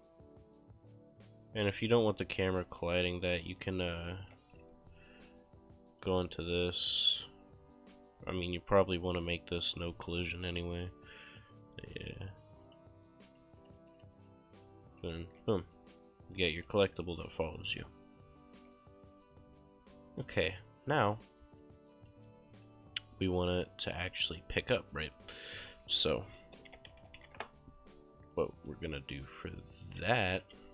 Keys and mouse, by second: 0.0-0.3 typing, 2.3-4.6 typing, 4.9 Escape, 6.5 click, 8.9 click, 13.3 right click, 13.4-15.9 typing, 17.0-19.0 typing, 19.7 Escape, 20.3 right click, 23.6 click, 25.7-27.8 typing, 28.4 click, 28.5 right click, 29.6 click, 30.5-30.7 typing.